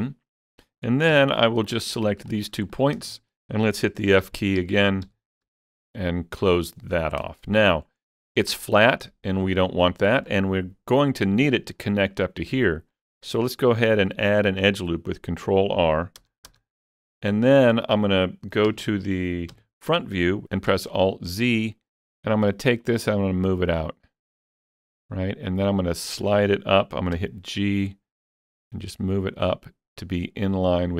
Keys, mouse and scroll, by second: 0.0-2.3 middle drag, 1.1 1, 1.7 click, 2.7 middle click, 4.2 f, 4.6 f, 5.1 f, 5.5 f, 6.0-8.1 shift+middle drag, 8.1 middle click, 8.8-11.9 middle drag, 11.9-16.5 middle drag, 14.1 ctrl+r, 16.2 Return, 16.5 Return, 17.5-17.8 scroll up 4, 17.8 middle click, 18.7 KP_3, 19.5 KP_1, 20.7 alt+z, 22.4-25.9 drag, 27.2 g.